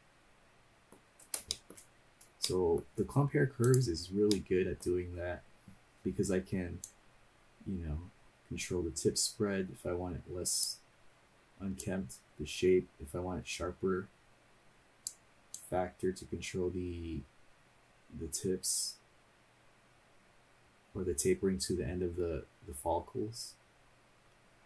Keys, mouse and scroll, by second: 1.5 shift+middle click, 1.9 scroll up 2, 2.5 middle click, 3.6 click, 4.3 middle click, 5.1 scroll down 1, 6.8-24.6 drag.